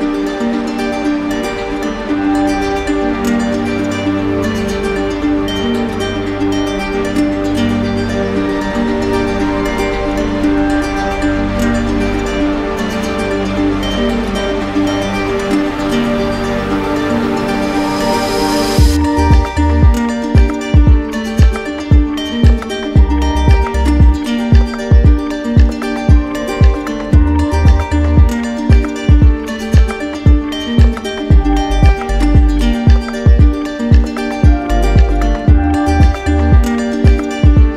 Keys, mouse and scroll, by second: 8.1 ctrl+click, 8.9 ctrl+click, 10.5 click, 11.2 click, 11.8 click, 13.9 click, 14.6 click, 16.0 q, 16.8 click, 17.3 shift+click, 21.1 click, 24.9 z, 26.5 click, 28.0 shift+click, 29.6 click, 34.7 click, 35.2 click, 36.0 click.